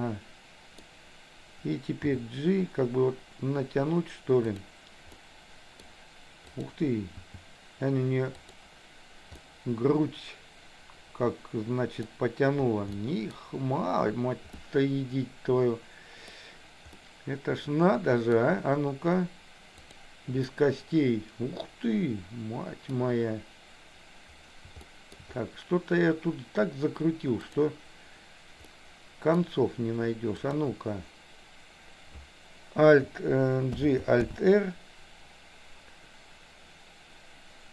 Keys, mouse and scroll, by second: 2.1 g, 5.2 middle click, 5.8 scroll down 1, 6.4 click, 7.2 g, 9.3-12.2 middle drag, 12.9 middle click, 14.6-16.3 middle drag, 16.3 scroll down 1, 17.0-18.4 middle drag, 19.8 click, 20.6-23.0 middle drag, 23.0 scroll down 1, 24.8 shift+middle click, 27.5 click, 28.7 middle click, 30.4 click, 33.8 alt+g, 34.2 alt+r.